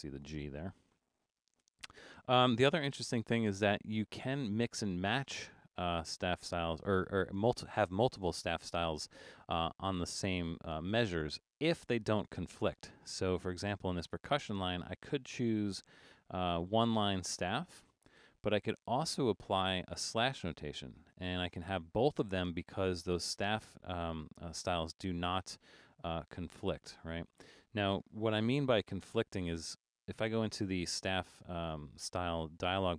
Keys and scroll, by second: 1.7 BackSpace, 2.9 super+-, 3.5 super+-, 28.4 BackSpace, 29.5 BackSpace.